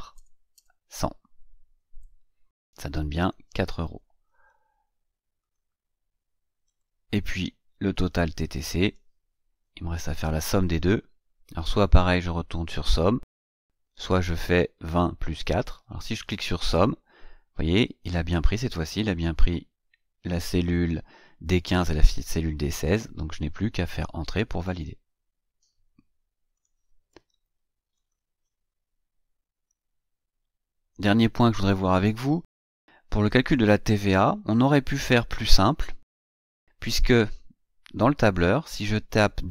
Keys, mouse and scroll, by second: 0.0 KP_0, 1.6 KP_Enter, 2.9 click, 5.2 click, 6.5 click, 8.3 click, 15.8 click, 24.9 Return, 26.3 click, 27.7 click, 28.8-29.4 scroll up 1, 30.0 scroll down 1, 30.9 scroll down 2, 33.2 click, 35.8 click, 37.1 click.